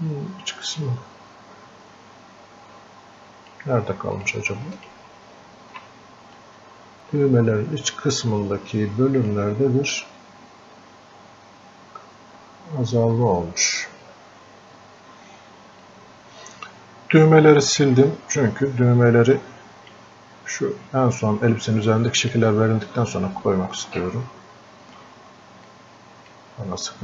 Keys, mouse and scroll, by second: 6.4 click, 6.9-10.1 drag, 10.1 scroll down 1, 13.7-14.3 scroll up 1, 19.4-21.9 drag, 21.9-24.7 drag, 25.7-27.0 drag.